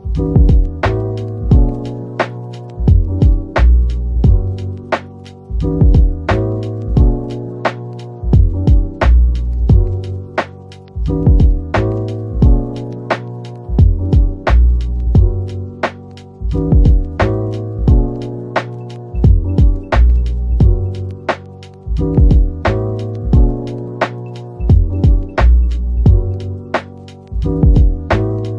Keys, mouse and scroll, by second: 0.2-1.2 typing, 1.8 middle click, 3.3-3.7 typing, 4.7-5.4 scroll, 5.1-6.1 typing, 6.4 middle click, 8.3-8.7 typing, 10.5 middle click, 14.0-14.6 scroll up 1, 14.4-15.2 typing, 16.5 typing, 19.2 middle click, 21.0-22.0 typing, 23.1-24.0 typing.